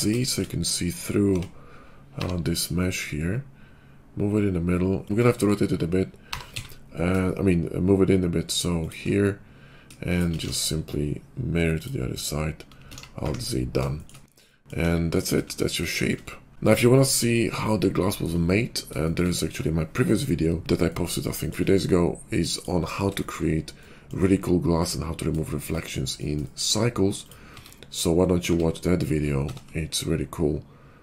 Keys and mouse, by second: 1.2 f, 2.1 g, 5.1 shift+middle click, 5.5-7.2 drag, 6.3 g, 7.2-10.3 shift+middle drag, 10.3 alt+x, 11.8 alt+x, 12.9 alt+z, 14.4-26.9 middle drag, 14.8 KP_5, 27.4 Tab, 28.4 Tab, 29.4 ctrl+a.